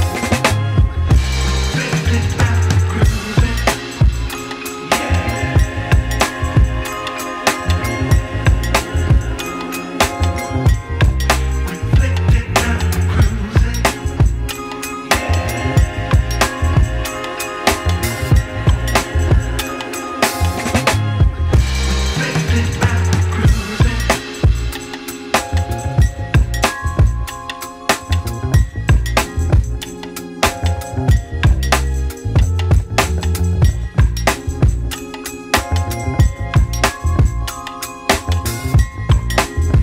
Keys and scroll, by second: 20.5 4, 20.7 Return.